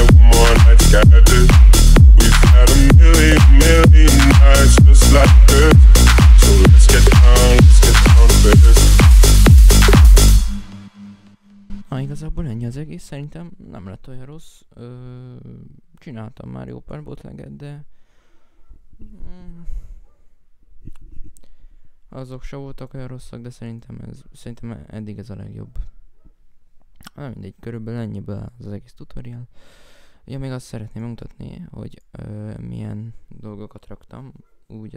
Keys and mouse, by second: 29.4 F9, 32.9 right click.